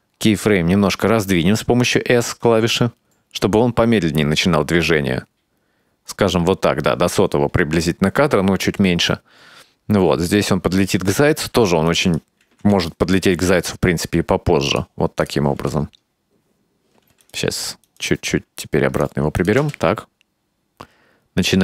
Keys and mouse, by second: 2.8 space, 5.7 s, 10.9 space, 12.0 right drag, 12.5 g, 15.3 click, 15.6 space, 17.1 space, 17.3 right click, 17.9 right click, 18.4 s, 19.5 click, 19.7 space.